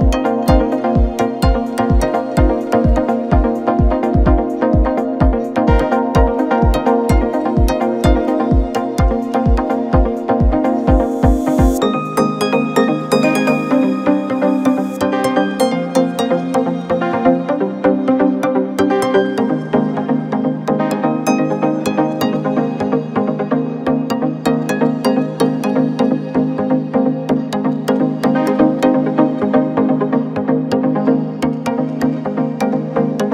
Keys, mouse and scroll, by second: 12.4 scroll up 3, 12.6-13.3 scroll down 2, 13.3-14.7 scroll down 1, 14.7-16.1 drag, 16.1 scroll up 2, 16.4-18.3 scroll down 1, 18.3-19.2 scroll down 1, 19.2 Tab, 20.7-21.8 scroll down 3, 23.3 Tab, 26.1-33.3 drag.